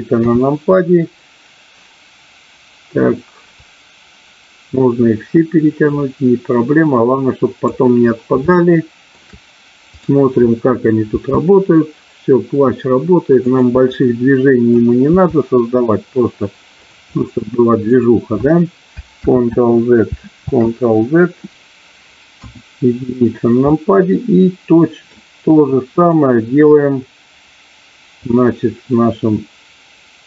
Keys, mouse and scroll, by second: 0.2 KP_3, 3.5-7.7 drag, 8.4 shift+middle click, 9.9-10.9 drag, 11.2 r, 13.4 click, 13.8 middle click, 15.0 r, 17.2 middle click, 20.4 ctrl+z, 22.0 ctrl+z, 22.3 KP_1, 23.7-25.0 middle drag, 25.9-27.2 drag, 28.3-30.2 drag.